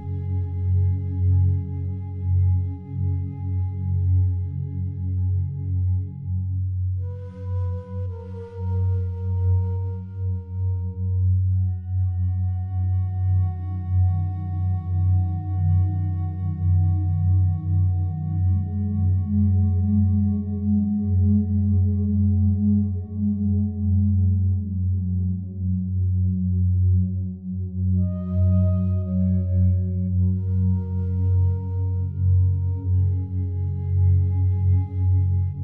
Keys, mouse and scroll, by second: 2.7 3, 3.2 right click, 8.1 click, 9.1 e, 11.0 click, 18.4 shift+Num_Lock, 18.4 click, 19.0 shift+right click, 26.0 e, 30.2 click, 31.0 a, 31.2 a, 34.4 Tab, 34.9 right click.